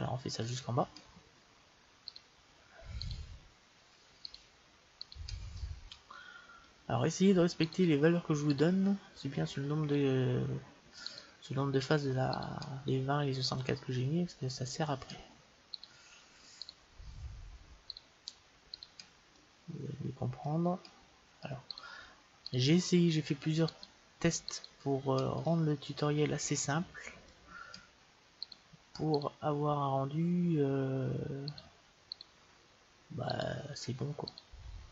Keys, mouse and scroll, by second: 5.6-7.5 middle drag, 7.7-14.1 right drag, 13.3-15.0 middle drag, 15.8-20.5 right drag, 19.4-21.7 middle drag, 20.6 right click, 21.7-26.5 right drag, 25.5-27.3 middle drag, 28.5-31.0 right drag, 31.5-34.9 right drag.